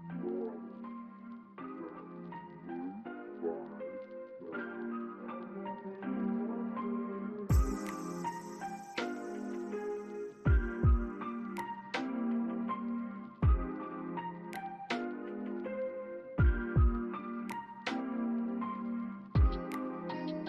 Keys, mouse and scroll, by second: 0.1 ctrl+z, 1.2 ctrl+z, 1.9 ctrl+click, 3.3 BackSpace, 6.1 right click, 8.8 alt+click, 9.9 double click, 11.3 BackSpace, 12.1 scroll down 1, 12.4 alt+click, 13.8 alt+middle click, 15.2 alt+middle click, 15.3 alt+scroll up 1, 15.6 alt+click, 16.6 middle click.